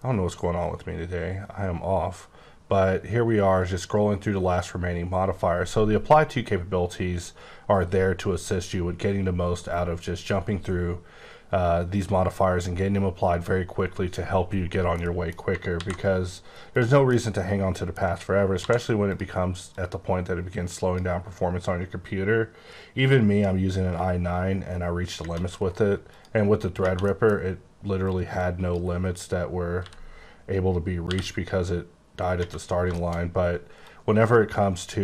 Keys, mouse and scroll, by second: 0.3-0.6 scroll up 5, 0.8-1.3 scroll down 4, 1.3-1.7 scroll up 2, 1.7-2.1 scroll down 3, 2.3 scroll up 2, 2.7-3.2 scroll down 2, 3.2-3.6 scroll up 3, 3.6-4.1 scroll down 3, 4.1-4.5 scroll up 3, 4.5-5.2 scroll down 2, 5.2-7.4 scroll up 2, 7.4-8.0 scroll up 1, 8.2-9.5 scroll down 4, 9.5 right click, 15.0 middle click, 15.7 alt+x, 16.7 click, 17.1 middle click, 18.1 scroll up 1, 18.6 d, 19.1 click, 19.6 click, 23.6-23.9 scroll down 1, 23.9 b, 25.2 space, 26.1 click, 26.8 space, 27.0 middle click, 27.3 scroll up 2, 28.0 click, 29.8 b, 31.0 t, 32.4 space, 32.9 shift+middle click, 33.1 shift+scroll up 2, 33.8 click.